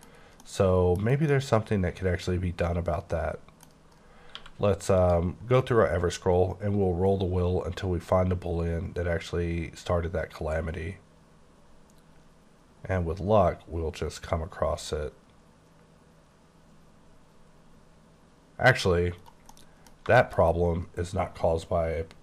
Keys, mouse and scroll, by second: 0.1 scroll down 3, 0.4 middle click, 1.0 scroll down 3, 1.3 middle click, 3.8-4.3 scroll down 2, 4.3 q, 5.0 click, 5.9-6.9 scroll down 10, 7.5-9.0 scroll down 12, 9.4-10.2 scroll down 6, 10.6-14.6 scroll down 17, 15.4 scroll down 1, 16.1-18.5 scroll down 15, 18.7 scroll up 7, 19.2 right click, 19.6 middle click, 20.4 scroll up 2.